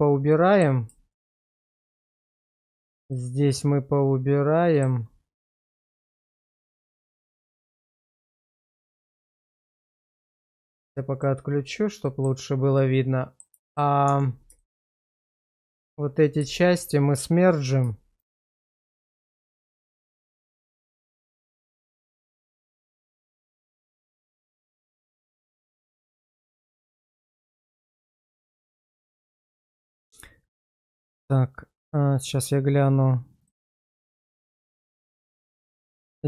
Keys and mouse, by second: 0.3 middle click, 1.1 shift+click, 2.3 shift+middle click, 2.7 shift+middle click, 3.1-4.8 middle drag, 6.0 shift+click, 7.6 shift+middle click, 8.5 ctrl+x, 9.3 shift+middle click, 11.2 click, 12.0 middle click, 12.8 middle click, 13.6 shift+middle click, 14.1 Tab, 14.6 shift+middle click, 16.4 1, 18.6 1, 19.2 shift+middle click, 19.6 shift+middle click, 20.0 middle click, 21.8 1, 22.3 shift+middle click, 23.0 click, 23.8 1, 24.3 shift+middle click, 24.7 shift+middle click, 25.1 middle click, 26.0 middle click, 27.7 1, 29.0 click, 29.4 1, 31.0-32.0 drag.